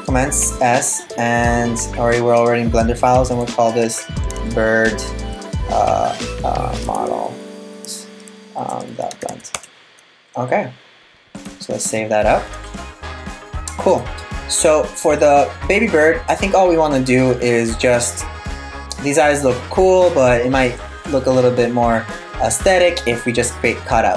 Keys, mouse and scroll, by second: 13.5 click, 14.2 middle click.